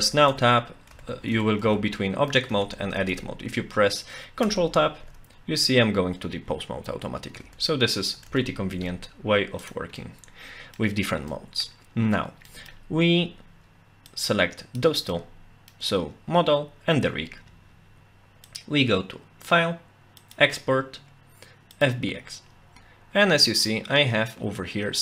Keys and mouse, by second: 0.9 Tab, 1.3 Tab, 1.6 Tab, 2.5 Tab, 3.0 Tab, 4.4 ctrl+Tab, 7.4 Tab, 8.2 ctrl+Tab, 10.0-10.8 middle drag, 11.3-11.6 middle drag, 12.5 middle click, 14.2-14.8 drag, 15.1 middle click, 18.5-22.1 drag.